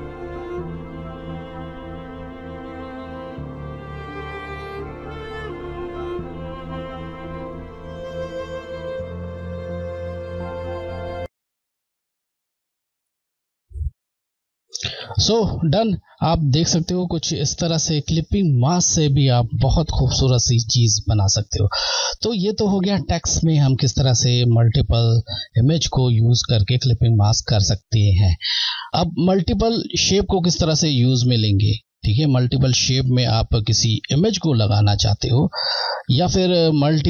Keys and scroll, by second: 0.8 Delete, 1.3 d, 1.5 Left, 4.3 Right, 4.7 Left, 5.7 t, 5.9 scroll, 6.4 Left, 8.5 scroll, 8.9 Left, 9.3 ctrl+t, 9.7 Left, 10.7 Left, 11.1 Left, 14.0 scroll, 15.2 scroll.